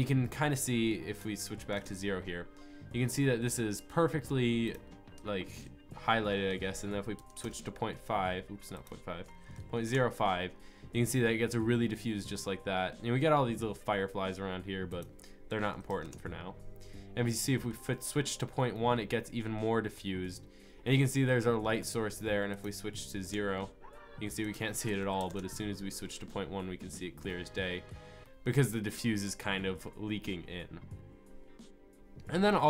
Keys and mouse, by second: 1.1-4.2 drag, 4.7-6.5 drag, 9.7 click, 14.9-17.4 drag, 17.4-18.3 middle drag, 18.5 middle click, 19.5 middle click, 19.7 middle click, 19.9 middle click, 27.9-29.6 middle drag, 32.5-32.6 drag.